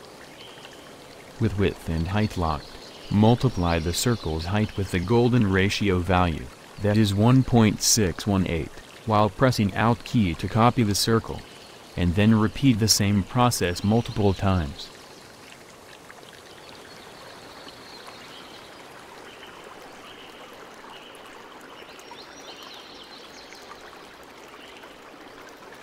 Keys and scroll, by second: 6.9 ctrl+c, 9.7 alt+Return, 11.8 ctrl+v, 12.7 alt+Return, 14.5 ctrl+v, 15.5 alt+Return, 19.8 ctrl+v, 20.5 alt+Return, 23.4 ctrl+v, 25.2 alt+Return.